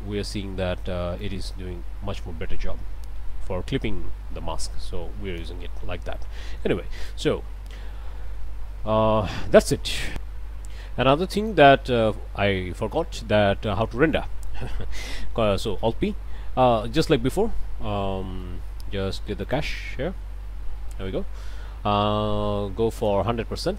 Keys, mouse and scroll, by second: 1.2-5.6 drag, 6.0 scroll down 1, 6.4 middle click, 10.1 click, 11.5 click, 14.1 middle click, 15.8 ctrl+alt+p, 16.7-18.6 middle drag, 19.4 click, 20.9 middle click, 22.9 click, 23.6 KP_1.